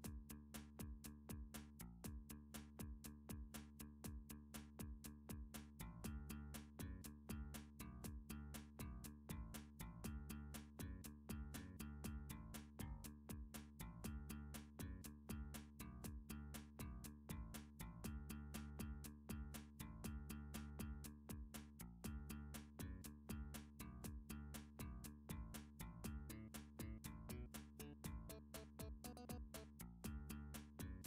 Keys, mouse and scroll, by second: 1.9 s, 6.3 click, 7.5 g, 11.9 click, 16.6 s, 19.4 click, 20.1 g, 22.4 click, 23.8 click, 24.8 e, 26.1 click, 27.2 click, 28.9-30.6 typing.